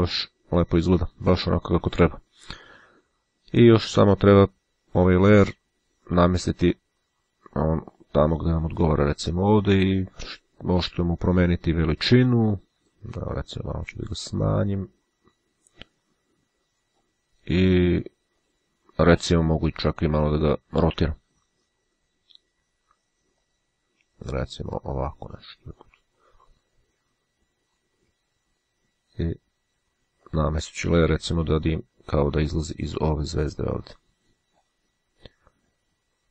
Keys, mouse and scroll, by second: 4.2 click, 6.5-10.6 drag, 12.6 click, 14.3-17.6 drag, 18.5 click, 23.5 click, 24.8-26.4 drag, 26.7 click, 30.3 click, 31.7-35.2 drag.